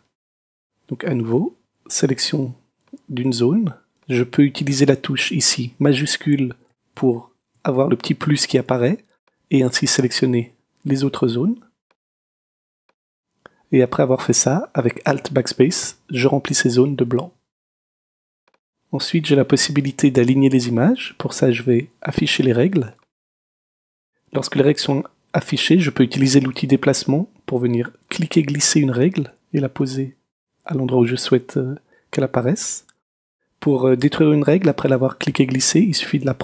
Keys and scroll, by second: 15.8 alt+BackSpace.